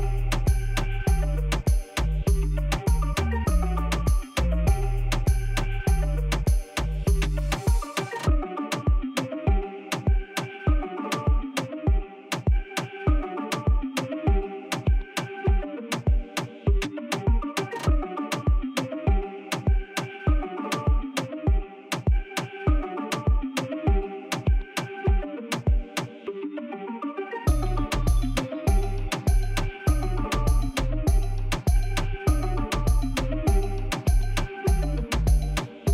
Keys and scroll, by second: 13.1 Tab, 23.8 space, 33.6 space.